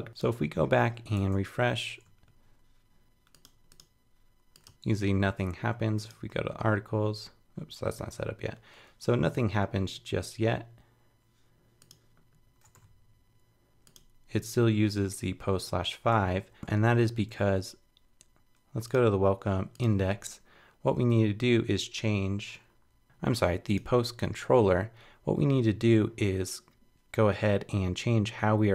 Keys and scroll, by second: 0.8 super+s, 1.2 super+Tab, 4.7 super+r, 16.1 super+Tab.